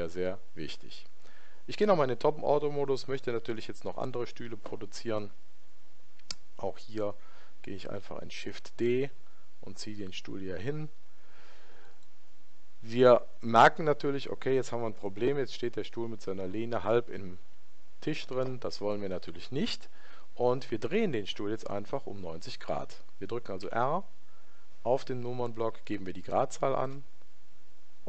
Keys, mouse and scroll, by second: 8.3 shift+d, 14.0-17.4 middle drag, 23.6 r.